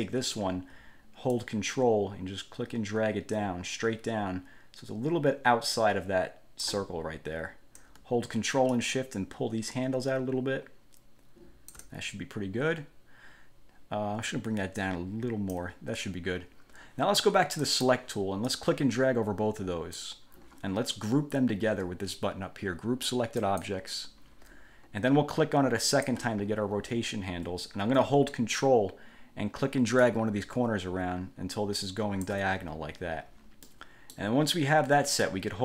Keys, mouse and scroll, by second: 1.6-7.0 ctrl+drag, 8.9-12.1 ctrl+shift+drag, 15.0 ctrl+click, 17.8 click, 18.6-20.4 drag, 23.6 click, 26.0 click, 30.2-32.6 ctrl+drag, 33.8 middle click.